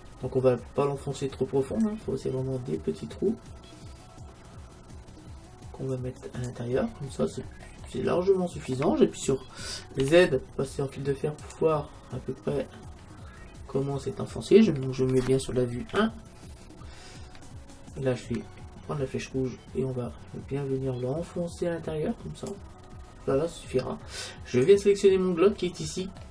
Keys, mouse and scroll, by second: 1.9-3.7 drag, 6.9-9.7 middle drag, 10.0 z, 12.6-15.9 middle drag, 15.9 KP_1, 19.4-21.0 drag, 22.9-24.7 middle drag, 24.7-26.3 right drag, 26.2 click.